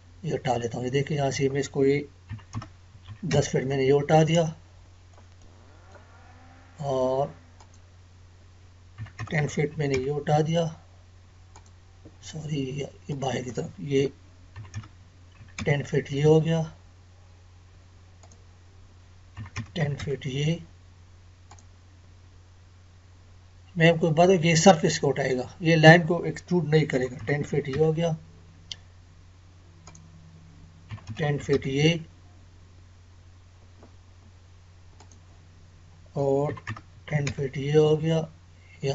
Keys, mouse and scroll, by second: 4.4 middle click, 5.3 scroll down 1, 5.4-7.6 middle drag, 7.5 click, 7.6 click, 10.6-11.2 scroll down 1, 11.5 click, 12.2 Escape, 13.1 click, 16.2-17.2 scroll down 1, 18.2 click, 21.4 click, 23.5 scroll up 1, 25.2 click, 33.8-34.1 scroll up 1, 34.9 click, 37.8 scroll down 1.